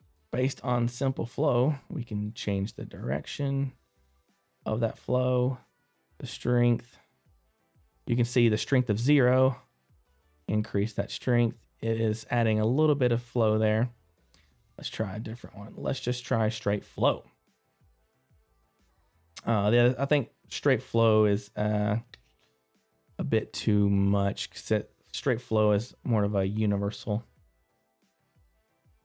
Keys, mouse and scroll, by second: 0.0 click, 9.0 click, 9.0 middle click, 10.1 click, 10.1 scroll up 1.